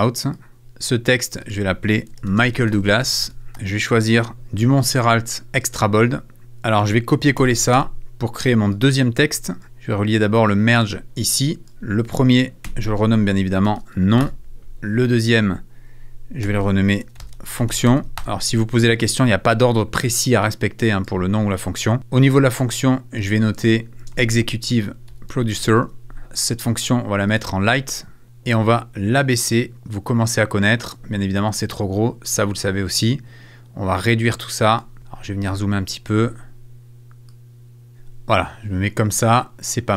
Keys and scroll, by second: 1.8-4.3 typing, 7.4 super+c, 7.7 super+v, 12.6 F2, 13.4-14.5 typing, 15.0 Return, 16.4 F2, 16.8-18.4 typing, 19.0 Return, 23.7-26.2 typing.